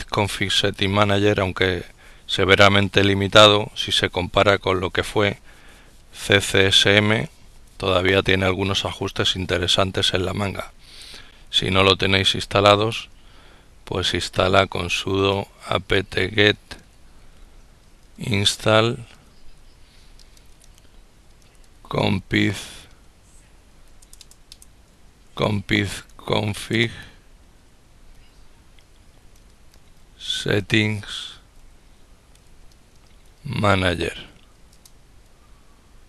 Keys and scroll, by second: 13.9-34.4 typing.